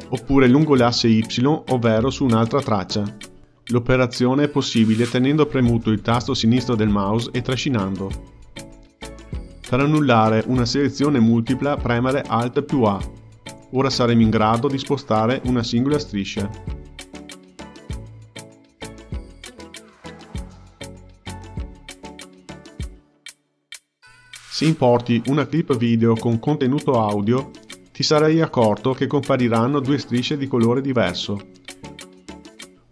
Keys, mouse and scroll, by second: 12.3 alt+a, 14.6 click, 15.3-17.0 drag, 17.2 click, 18.3-19.3 drag, 19.6-21.2 drag, 23.4 a, 24.8-27.5 drag, 31.8 click, 32.8 click.